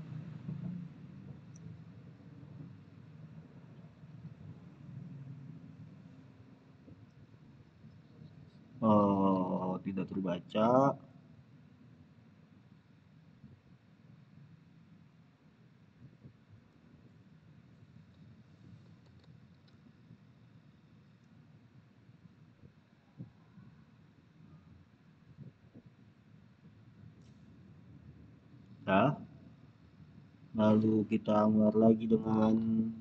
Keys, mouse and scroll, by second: 6.9 click, 9.2 ctrl+z, 11.0 click, 18.5 click, 18.9 ctrl+z, 21.1 click, 27.8 click, 30.2 click.